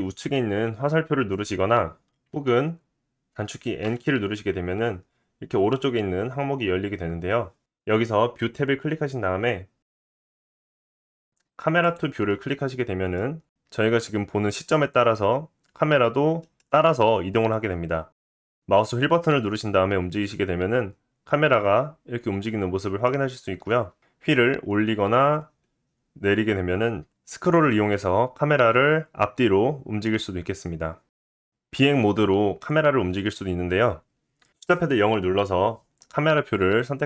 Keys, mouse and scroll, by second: 0.7-1.8 drag, 1.8-10.3 middle drag, 2.3 n, 3.8 n, 10.3-11.9 drag, 11.9-24.0 middle drag, 23.9 g, 24.6 scroll up 2, 24.7 middle click, 25.2-31.2 middle drag, 25.4-27.1 scroll down 3, 31.0-31.5 scroll up 2, 34.5 KP_0.